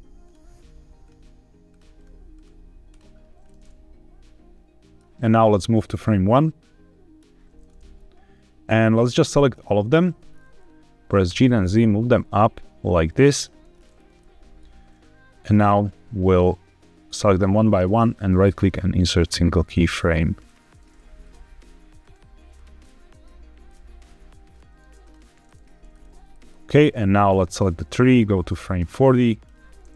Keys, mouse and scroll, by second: 0.1 click, 0.9 click, 1.8 right click, 2.2 right click, 3.3-4.9 middle drag, 5.5-7.1 drag, 7.5-8.2 scroll down 1, 9.0 shift+click, 9.4 shift+click, 9.9 shift+click, 10.2-10.5 scroll down 3, 11.2 g, 11.4 z, 13.2 click, 13.6-14.0 scroll up 3, 14.1-14.6 shift+middle drag, 15.3 click, 17.5-18.6 right drag, 19.1 click, 19.8 right click, 21.1 click, 21.9 right click, 22.7-23.5 middle drag, 23.5 click, 24.4 right click, 25.3-25.8 middle drag, 25.8 scroll down 2, 26.2 shift+middle click, 27.2 click, 28.1-29.3 drag.